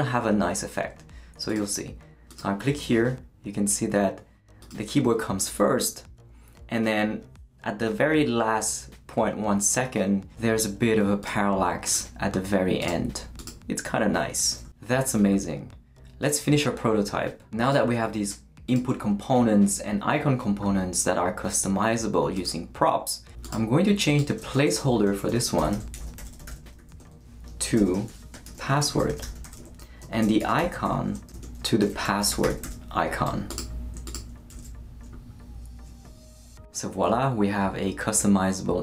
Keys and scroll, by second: 24.4-33.1 typing, 34.5 super+s.